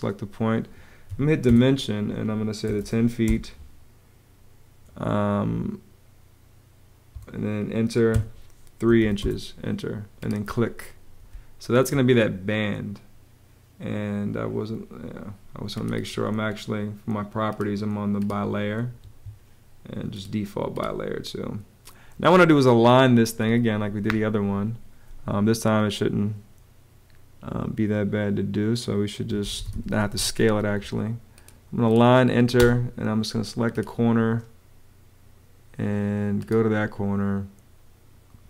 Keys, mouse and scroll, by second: 0.8 d, 1.2 Return, 2.2-3.5 typing, 6.8 Page_Up, 7.8 3, 8.7 ', 9.0 Return, 11.0 space, 18.7 Escape, 28.9-30.0 typing, 32.3 space.